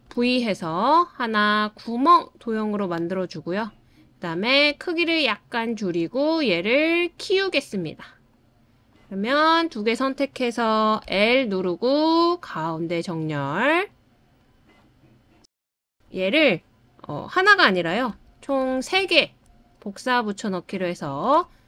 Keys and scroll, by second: 0.0 super+v, 14.9 l, 18.1 super+c, 18.5 super+v, 21.2 super+v.